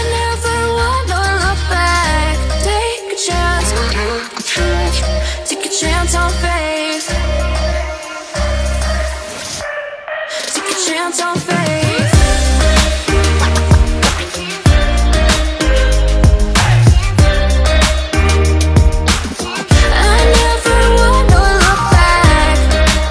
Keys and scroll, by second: 8.0 ctrl+j, 8.5 ctrl+j, 16.8 ctrl+j.